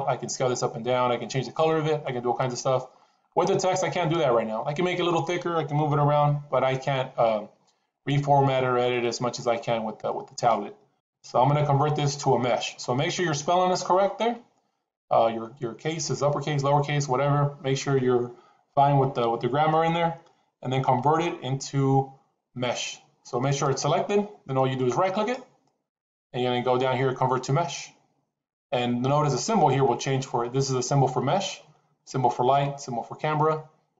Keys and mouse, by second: 1.6-1.9 middle drag, 5.7 KP_7, 8.8-9.4 middle drag, 10.9 KP_7, 23.5 click, 25.0-28.7 right drag.